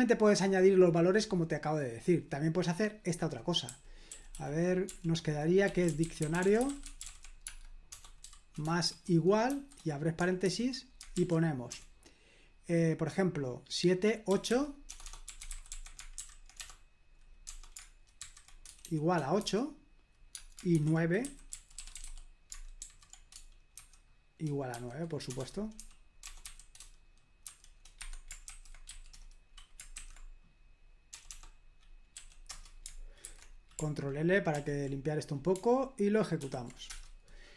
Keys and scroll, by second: 0.0-1.7 scroll up 2, 3.4-11.7 typing, 14.0-22.8 typing, 23.8-28.9 typing, 28.0 Escape, 31.1 BackSpace, 31.3 BackSpace, 32.1 w, 32.5 Return, 33.2 super+h, 34.5 ctrl+l, 36.4 ctrl+p, 36.9 Return.